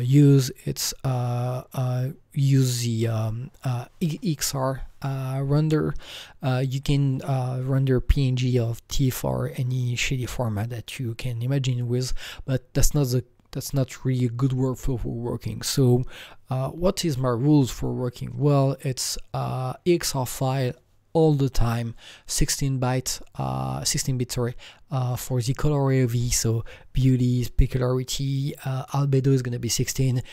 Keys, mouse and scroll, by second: 0.7 Right, 1.9 Right, 2.5 Right, 2.9 Right.